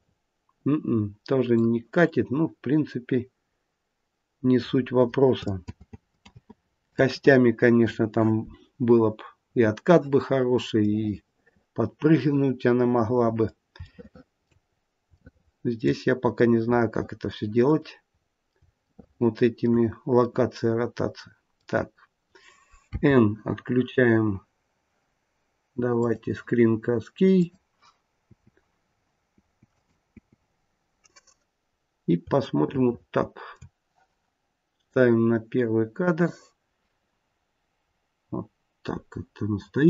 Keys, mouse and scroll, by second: 5.6 ctrl+z, 6.2 ctrl+z, 6.9 ctrl+z, 8.9-9.2 scroll up 3, 9.4-9.8 scroll down 2, 10.7 middle click, 10.9 middle click, 12.0 middle click, 13.7 shift+middle click, 14.6 scroll down 3, 15.1 shift+middle click, 16.3 middle click, 17.6 click, 18.1-18.5 scroll up 3, 18.7 shift+middle click, 20.2 middle click, 22.8 n, 25.9 click.